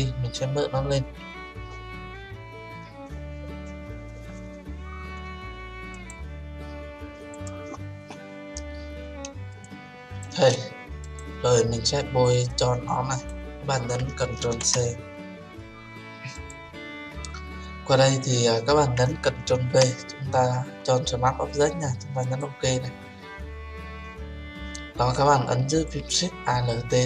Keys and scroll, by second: 14.4 ctrl+c, 19.5 ctrl+v.